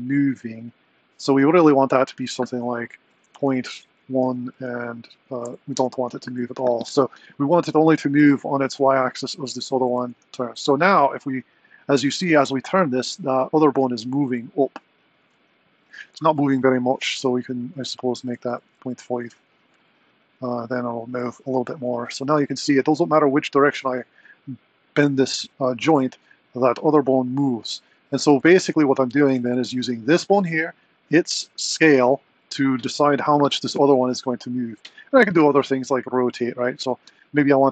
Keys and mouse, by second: 10.1 r, 16.4 click, 17.7-19.7 drag, 21.1 click, 21.8 r, 30.1 click, 32.4 click, 35.3 click.